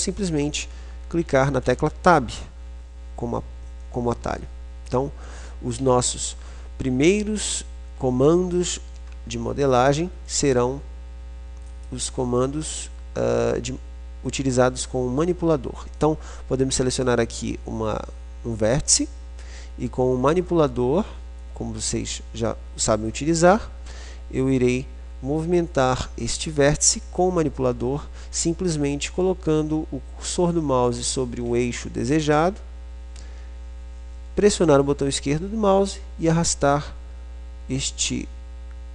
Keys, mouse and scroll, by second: 1.8 Tab, 4.1 middle click, 6.0 a, 9.6 middle click, 12.0-13.6 drag, 13.6 middle click, 21.6-23.5 drag.